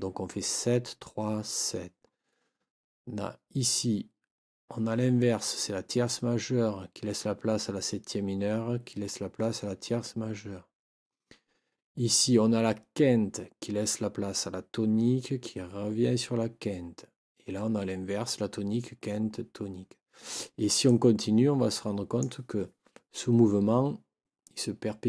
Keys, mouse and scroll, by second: 20.9-22.4 drag.